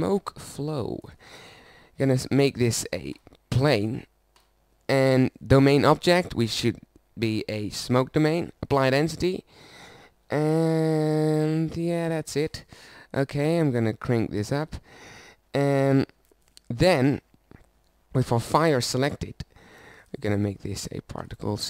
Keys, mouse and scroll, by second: 0.8 click, 10.7-11.8 right drag, 15.1-16.5 right drag.